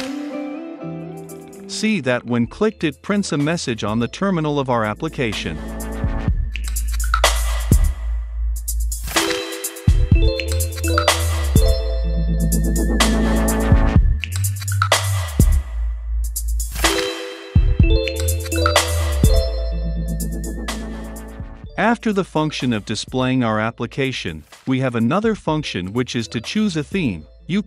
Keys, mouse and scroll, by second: 1.1-4.9 drag, 4.9-7.4 scroll down 2, 7.4-17.1 drag, 17.1-18.2 scroll up 2, 18.1-18.9 typing, 18.2 click, 18.7 click, 18.8-19.1 scroll down 2, 19.1-19.7 scroll up 2, 19.7-20.6 scroll up 1, 20.6-24.1 drag, 26.2 click.